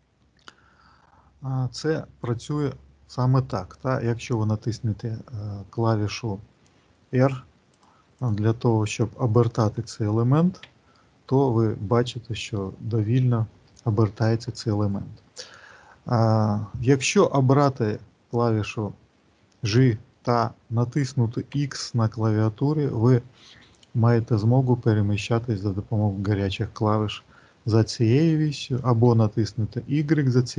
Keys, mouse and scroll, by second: 7.7 click, 8.1 click, 10.5 r.